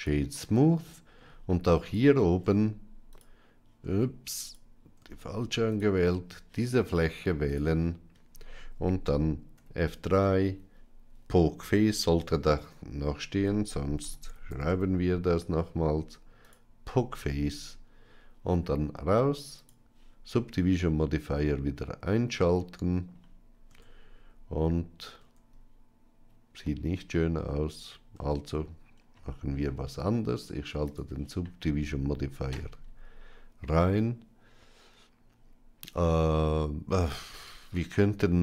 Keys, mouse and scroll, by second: 0.6-1.1 middle drag, 1.6 click, 2.2 Tab, 3.0 click, 3.7 Tab, 4.2 click, 5.0 Tab, 7.3 click, 9.5 F3, 17.5 Tab, 19.5 click, 20.8-22.9 middle drag, 23.6 Tab, 25.1 Tab, 26.5-27.3 middle drag, 28.0 Tab, 30.7 click, 37.7 ctrl+r.